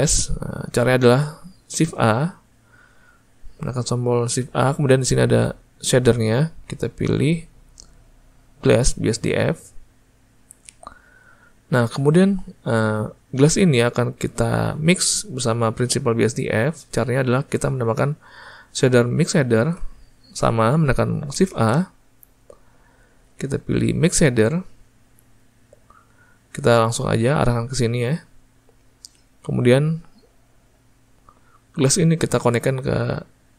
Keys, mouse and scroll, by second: 33.3 click.